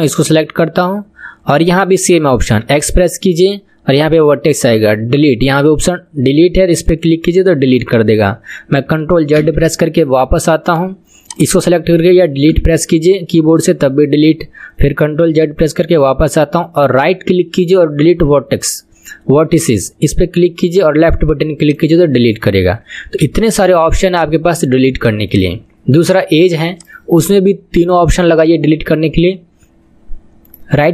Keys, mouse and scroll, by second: 2.6 x, 9.4 ctrl+z, 10.7 click, 11.3 click, 12.5 Delete, 15.2 ctrl+z, 16.6-19.8 right drag, 23.2 ctrl+z, 25.3 click, 26.1 click.